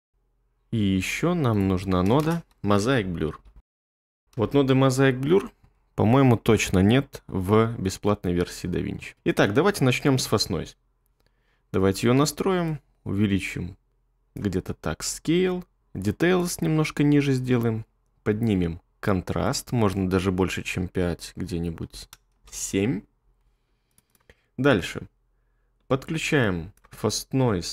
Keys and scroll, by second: 2.2-4.2 typing, 4.4 Return, 10.2 1, 21.8 7, 22.3-25.8 Return, 25.9 typing.